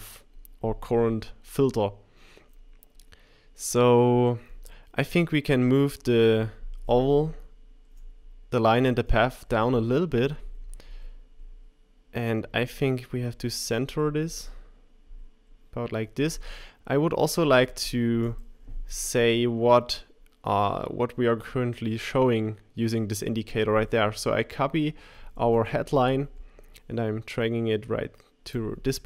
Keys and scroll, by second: 15.1 Page_Down, 25.2 super+c.